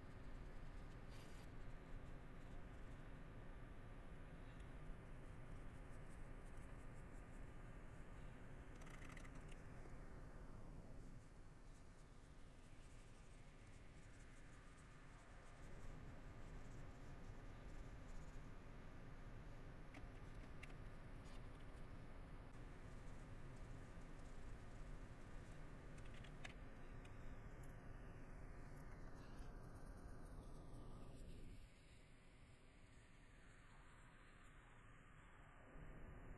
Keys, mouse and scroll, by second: 0.8 middle click, 2.2 middle click, 3.0 middle click, 5.3 middle click, 6.2 middle click, 7.4 middle click, 8.2 middle click, 9.5 middle click, 11.8 middle click, 12.3 middle click, 13.4 middle click, 14.9 middle click, 15.9 middle click, 17.0 middle click, 18.4 middle click, 20.8 shift+middle click, 21.8 middle click, 22.5 middle click, 23.2 middle click, 23.8 middle click, 25.5 middle click, 26.0 middle click, 27.2 middle click, 27.6 scroll, 27.8 middle click, 28.3 middle click, 28.7 scroll, 28.9 shift+middle click, 29.3 middle click, 30.0 middle click, 31.1 middle click, 33.9 middle click, 35.4 middle click.